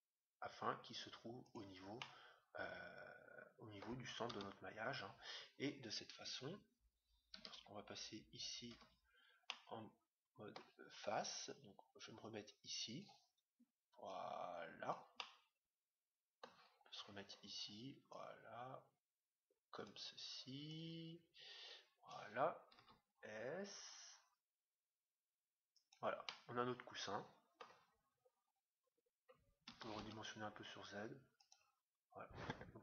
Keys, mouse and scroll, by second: 1.9-3.5 middle drag, 4.2 Tab, 6.3 KP_1, 7.4 KP_3, 8.7 KP_1, 9.5-11.1 middle drag, 11.7-13.3 drag, 14.0-15.6 drag, 15.1-16.9 middle drag, 17.1-18.1 scroll down 1, 18.1-20.0 drag, 18.1-18.9 scroll down 1, 20.7-22.2 drag, 22.7 s, 26.2-28.0 middle drag, 28.0-28.9 scroll up 1, 28.9-30.2 middle drag, 29.6 s, 30.2-30.7 scroll down 1, 30.7 middle click, 31.9-32.8 middle drag.